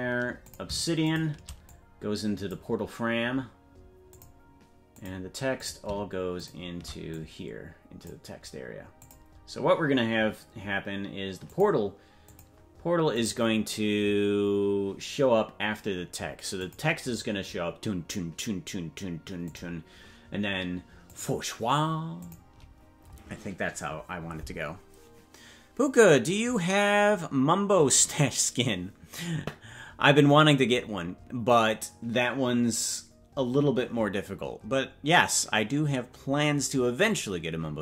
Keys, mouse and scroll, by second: 1.1 shift+click, 1.6-5.7 drag, 7.1-8.9 shift+drag, 11.5-17.1 drag, 19.7 click, 21.1-23.7 drag.